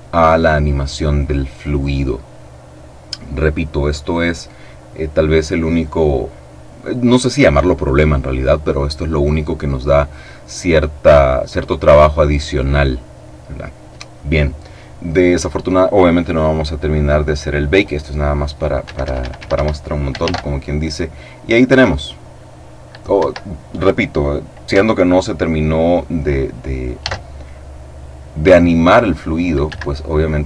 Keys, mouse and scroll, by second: 18.7 Escape, 20.0 alt+a, 22.9 Escape, 26.7 alt+a, 29.3 Escape.